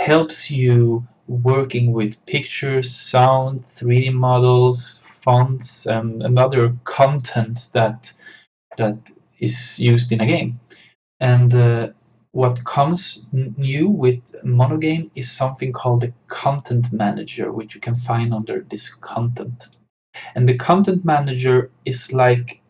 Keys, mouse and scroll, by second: 16.5 click.